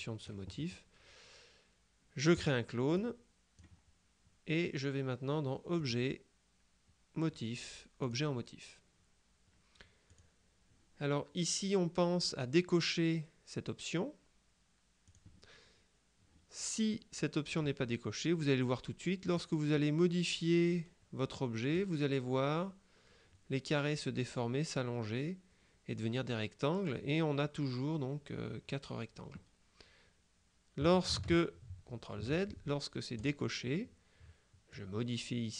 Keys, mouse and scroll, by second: 2.5 click, 5.9 click, 8.1 click, 10.1 click, 15.1 click, 17.6 click, 19.5-22.3 drag, 31.8 ctrl+z, 33.3 click, 34.8-35.5 drag.